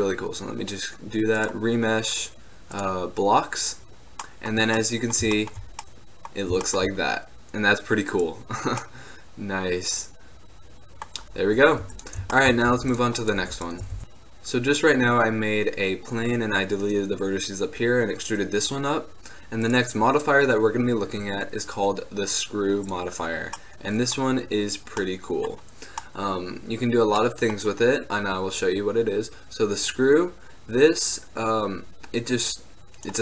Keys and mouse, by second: 2.9-4.1 drag, 4.1 middle drag, 4.1 drag, 4.3 middle click, 4.4 click, 4.5 middle click, 4.6 click, 4.7 middle click, 8.2 click, 8.9-10.0 drag, 10.0 middle drag, 12.0-14.0 drag, 12.8 x, 13.4-14.0 middle drag, 13.4-14.0 right drag, 13.5 x, 19.7-21.7 drag, 23.5 middle drag, 23.7-30.0 middle drag.